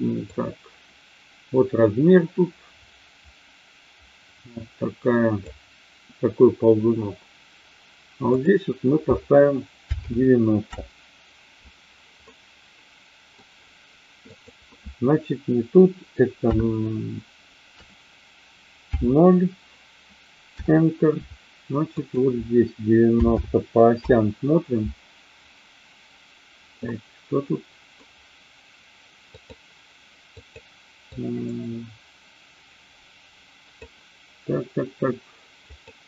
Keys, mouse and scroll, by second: 0.2-5.4 drag, 8.2-11.6 drag, 12.3-13.4 middle drag, 14.3-21.6 drag, 21.9-25.3 drag, 26.9-27.9 middle drag, 29.3-30.6 drag, 31.1-33.8 drag, 35.6-36.0 drag.